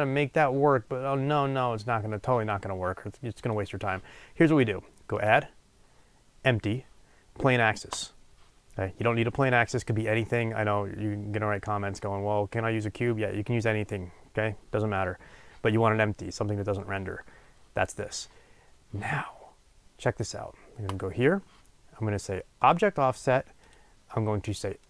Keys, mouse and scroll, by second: 7.9-20.9 drag, 22.6 click.